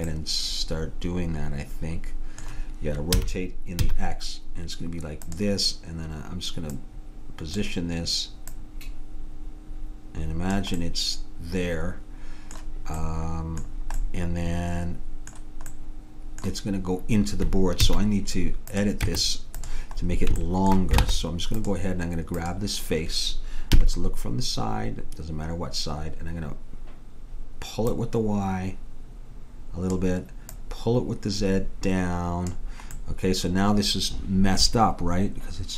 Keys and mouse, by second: 0.5-2.0 middle drag, 3.2 r, 6.9-10.5 drag, 10.9 middle click, 17.9 a, 18.8-20.6 drag, 19.1 Tab, 21.1 ctrl+Tab, 23.8 KP_3, 27.9-29.8 drag, 30.6-32.4 drag, 33.0-34.9 middle drag.